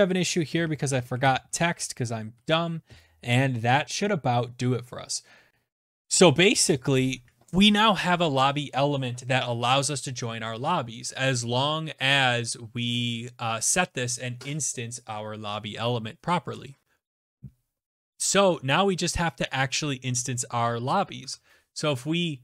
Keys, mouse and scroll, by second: 0.2 ctrl+s, 19.0 alt+Tab.